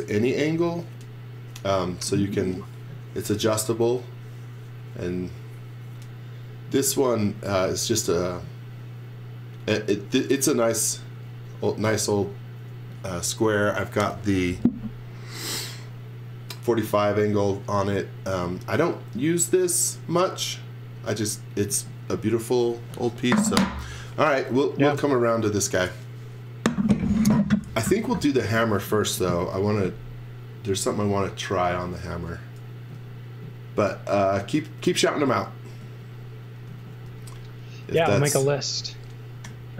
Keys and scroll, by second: 35.8 z, 36.6 x, 37.0 v, 39.4 p.